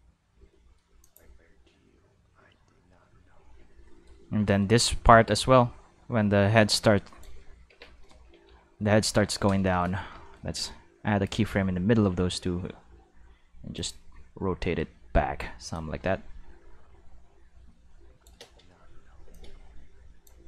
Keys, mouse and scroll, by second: 0.3 space, 0.5 middle click, 1.0 click, 1.2 space, 3.6 space, 3.9 middle click, 4.5 middle click, 4.8-7.2 drag, 7.7 Tab, 8.0 shift+middle click, 8.5 q, 9.1 a, 11.6 r, 13.8 click, 15.7-18.2 drag, 18.4 space, 19.3 space, 19.3-20.3 drag.